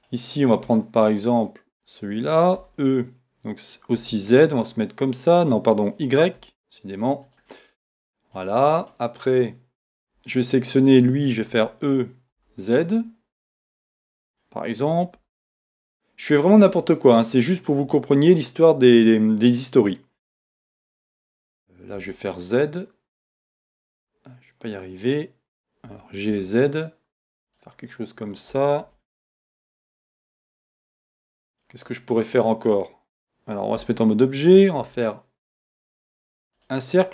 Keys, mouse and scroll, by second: 1.0 click, 1.5-7.4 middle drag, 2.6 e, 7.3 click, 7.6 scroll down 1, 7.7-8.8 middle drag, 8.8-9.8 right drag, 9.8 click, 10.3-13.5 middle drag, 11.5 e, 13.5 click, 13.7-16.5 middle drag, 15.2 e, 16.5 click, 16.8-18.2 middle drag, 20.8-25.9 middle drag, 22.0 z, 25.9 g, 27.6 click, 27.9-34.8 middle drag, 33.8 Tab, 34.8 shift+a, 37.0-37.1 scroll down 1.